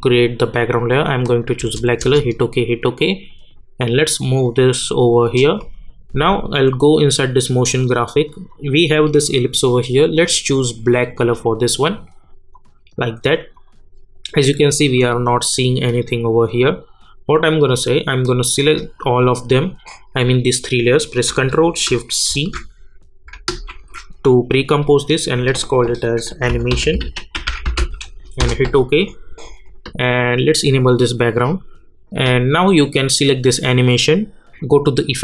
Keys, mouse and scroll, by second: 1.6 Return, 3.0-12.5 drag, 18.5 shift+click, 22.3 ctrl+shift+v, 23.7 ctrl+shift+c, 26.0-28.3 typing, 28.4 Return, 30.4 click, 33.1 click.